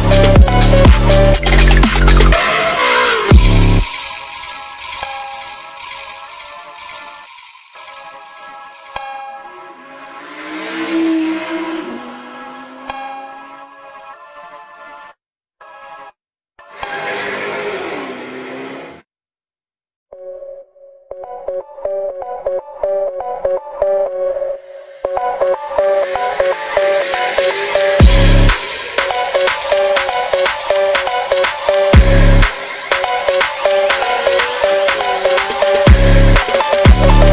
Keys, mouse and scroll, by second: 0.9 2, 1.2 shift+click, 2.5 alt+click, 2.7 alt+shift+click, 2.9 alt+shift+click, 3.4 f, 3.7 click, 4.3 3, 4.4 click, 4.6 e, 5.1 click, 5.2 Tab, 5.3 click, 5.7 Tab, 6.3-6.7 drag, 6.8 Tab, 7.3 r, 7.7 click, 8.0 shift+click, 8.3 ctrl+j, 8.7 click, 9.0 /, 9.4 click, 9.5 click, 9.8 click, 9.8 scroll down 1, 10.0 click, 10.3 h, 10.7 ctrl+z, 10.9 click, 11.2 click, 11.5 g, 12.3 click, 12.5 g, 14.7 s, 15.4 g, 16.3 g, 16.7 click, 17.0-17.4 scroll up 7, 17.4 g, 17.8 r, 19.0 g, 19.4 click, 20.5 click, 21.9 click, 22.5-23.1 scroll down 10, 26.5-27.8 drag, 27.8 scroll up 10, 27.9 click, 29.2 click, 32.2 click, 33.0 click, 33.2 click, 33.4 click, 33.7 shift+s, 33.9 Tab, 35.1 click, 35.6 r, 36.4 r, 37.0 click.